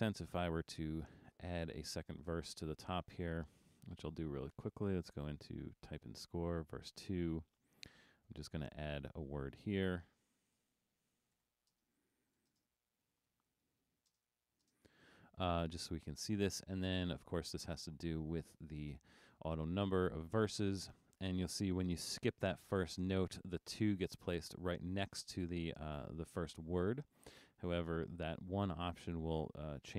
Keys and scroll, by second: 10.4-14.2 typing, 14.8 alt+space.